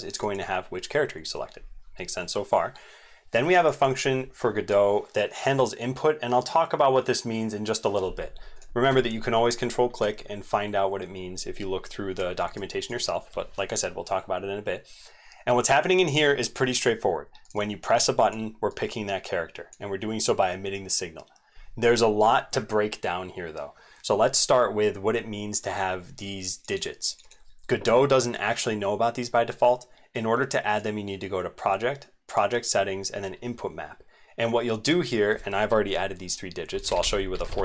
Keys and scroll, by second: 12.6 alt+Left.